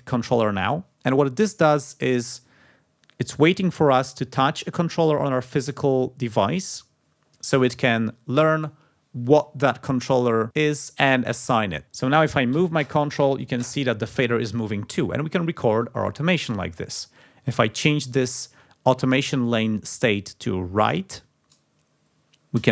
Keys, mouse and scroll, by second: 16.6 click, 18.1 scroll up 1, 21.4-21.9 scroll up 1.